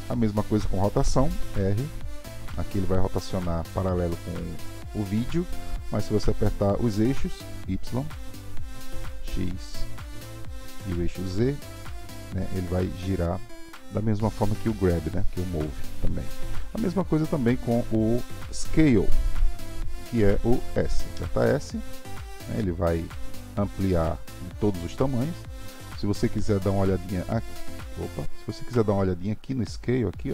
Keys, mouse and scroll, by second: 1.6 r, 21.1 s.